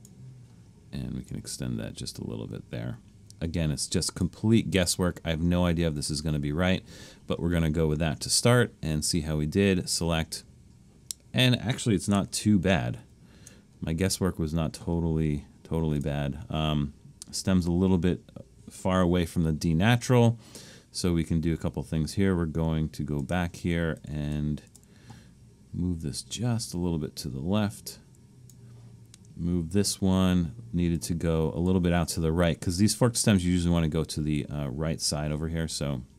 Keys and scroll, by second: 12.3 super+=, 13.0 super+=, 24.7 Return.